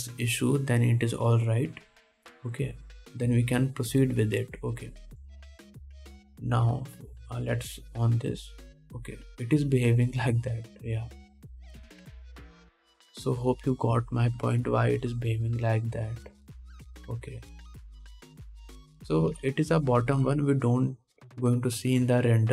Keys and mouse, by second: 3.2-19.0 drag, 9.3 middle click, 9.3 right click, 13.1 Tab, 13.4 alt+a, 13.9 ctrl+s, 19.0 middle click, 19.0 click, 20.5 ctrl+Tab.